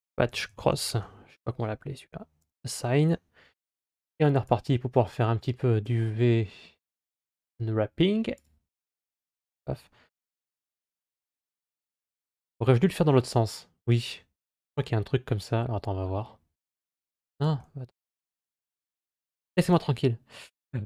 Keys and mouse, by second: 0.6 s, 2.2 click, 4.3-5.7 drag, 6.6-8.3 drag, 14.7-17.4 drag, 19.5-20.8 drag.